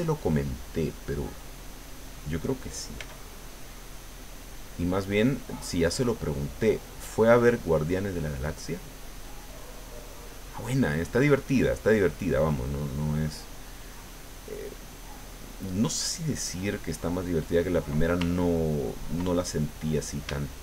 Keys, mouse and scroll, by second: 1.3 middle click, 3.0 f, 3.4 click, 4.0-7.6 drag, 7.7 middle click, 8.5-9.5 middle drag, 9.7-10.7 drag, 10.8 middle click, 11.8 click, 13.1 middle click, 13.9-17.1 drag, 17.2 middle click, 18.6 ctrl+click, 19.4 ctrl+middle click, 20.4 shift+middle click.